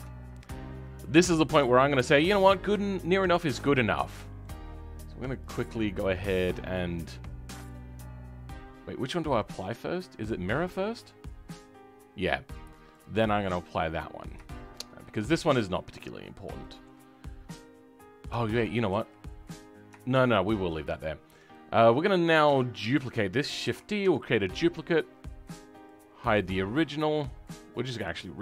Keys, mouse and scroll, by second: 0.0 middle click, 0.3-0.7 scroll down 3, 0.7-1.8 middle drag, 1.8-2.2 scroll up 2, 2.2-3.5 middle drag, 3.5 scroll down 2, 3.7-5.4 middle drag, 5.4 click, 5.6-6.0 scroll up 5, 6.0-11.2 middle drag, 11.2 click, 11.7-13.3 scroll up 3, 13.6 click, 13.8-14.4 scroll down 6, 14.4-16.0 shift+middle drag, 16.0 click, 16.1-16.5 scroll down 2, 16.5 shift+middle click, 17.1-18.4 scroll up 2, 18.4 ctrl+z, 18.8 ctrl+z, 20.1 ctrl+shift+z, 20.9 click, 21.1-21.5 scroll down 2, 21.5 middle click, 21.9 scroll up 2, 22.5-23.6 shift+middle drag, 23.6 shift+d, 28.0 click.